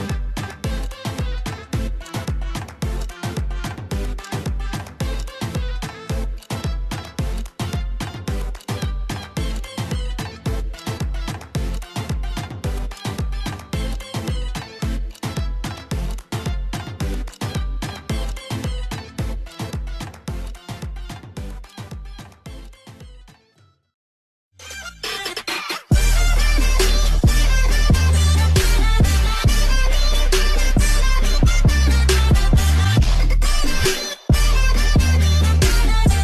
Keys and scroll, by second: 8.1 ctrl+c, 8.1 ctrl+v, 8.1 Delete, 17.7 ctrl+s, 18.5 alt+Tab, 19.7 Tab.